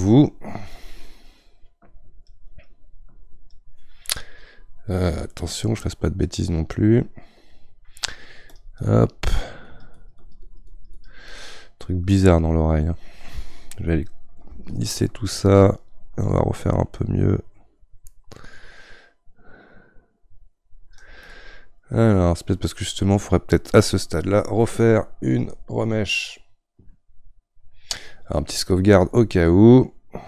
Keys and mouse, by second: 5.3-8.5 middle drag, 8.5-11.4 drag, 11.4-14.7 middle drag, 14.7-17.7 shift+drag, 21.3-30.2 middle drag.